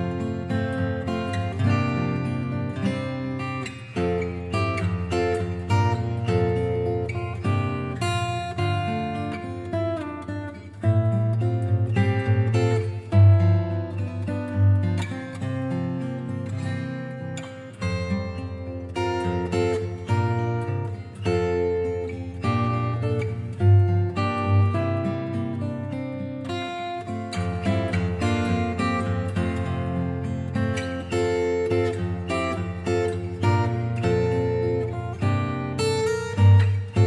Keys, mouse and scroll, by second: 0.7 6, 1.4 Return, 2.7 click, 3.6 click, 4.1 click, 5.4 click, 6.2 click, 6.7-8.1 scroll, 8.8 click, 9.6 Delete, 10.3 click, 11.5 scroll, 12.4 click, 15.7 click, 16.1 Delete, 16.8 click, 17.4 click, 19.8 click, 21.3 click, 23.2 click, 23.5-24.4 scroll, 26.6 click, 27.3-30.1 scroll, 30.7 click, 33.4 click, 36.8 click.